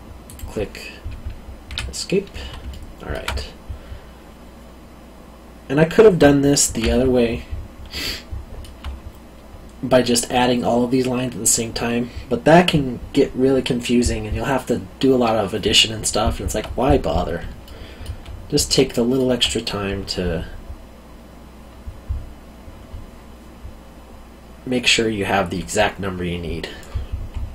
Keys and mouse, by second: 0.2 click, 1.6 Escape, 2.7 alt+middle click, 8.1 alt+middle click, 17.6 alt+middle click, 18.8 alt+middle click.